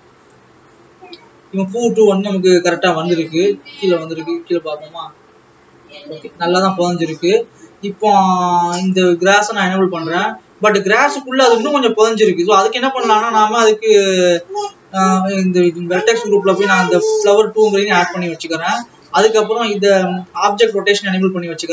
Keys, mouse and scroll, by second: 0.9-4.0 drag, 4.5 click, 7.8 scroll up 3, 8.4-8.9 scroll up 12, 9.6 click, 12.0-13.1 scroll down 10, 18.1-20.2 drag.